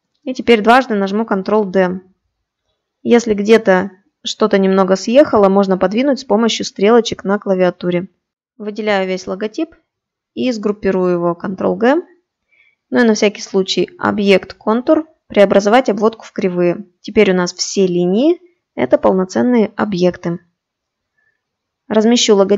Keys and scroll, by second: 10.2 ctrl+g.